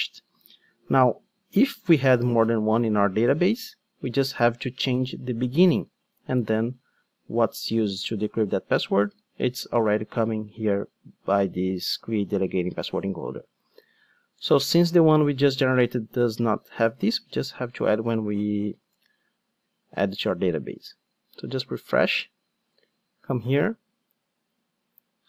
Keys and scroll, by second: 19.6 super+r.